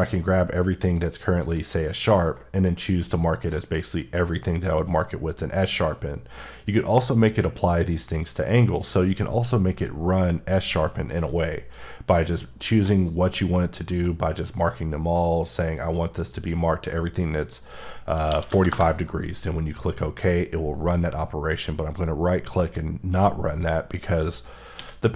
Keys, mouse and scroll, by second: 0.8 click, 1.4 click, 2.7 shift+click, 11.7 click, 18.3 KP_4, 18.5 KP_5, 18.7 KP_Enter, 21.5 right click, 24.8 q.